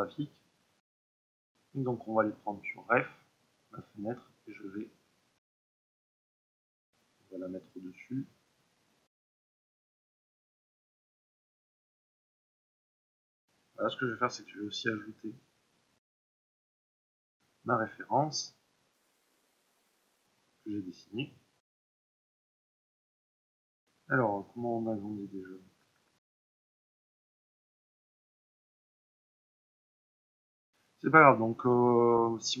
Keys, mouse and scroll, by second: 5.9-22.9 drag, 26.7 click, 28.9 click, 30.2-32.4 drag.